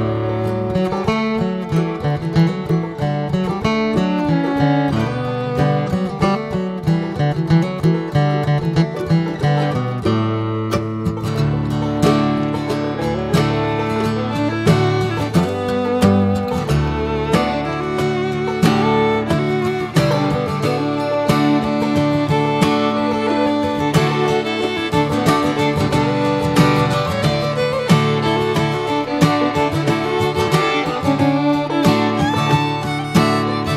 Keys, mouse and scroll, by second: 0.1-2.5 drag, 2.8 click, 3.3-4.1 middle drag, 4.1 click, 4.4 Tab, 4.8 scroll down 1, 5.0 middle click, 5.2 scroll up 2, 5.6 Tab, 6.0 Tab, 6.5 a, 7.0 alt+middle click, 7.5 alt+scroll up 1, 8.0 alt+middle click, 8.5 shift+middle click, 9.2 e, 14.7 Tab, 14.8 click, 15.2-15.9 middle drag, 15.9 click, 16.2-17.5 right drag, 17.5-18.4 middle drag, 18.4 click, 18.7 drag, 18.9 scroll down 3, 19.2-20.1 middle drag, 20.1 click, 20.5-20.8 middle drag, 20.8 click, 21.1 Tab, 21.4 alt+middle click, 22.0 alt+z, 22.4 scroll up 3, 22.7 shift+middle click, 23.2 scroll down 2, 23.8 shift+middle click, 24.3 Tab, 25.5 click, 25.8 ctrl+a, 26.5-27.2 shift+middle drag, 27.2 right click, 28.4 right click, 28.7-29.7 shift+middle drag, 29.7 r, 32.0 click, 33.5 drag.